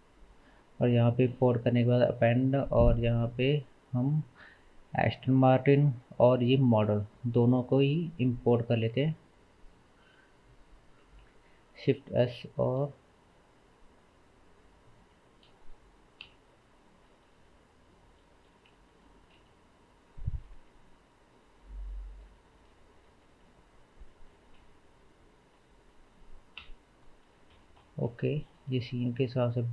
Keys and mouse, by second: 9.4 click, 10.0-10.8 drag, 12.7 shift+a, 16.2 KP_Decimal, 17.8 middle click, 18.7-28.7 middle drag, 19.4 shift+s, 20.6 KP_0, 26.6 KP_Decimal, 28.7 s.